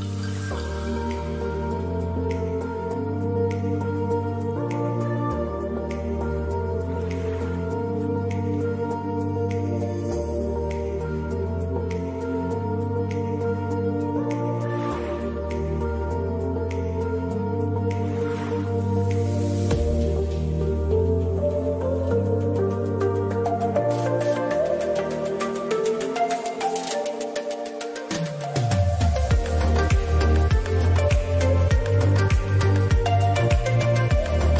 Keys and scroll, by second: 15.2 Return.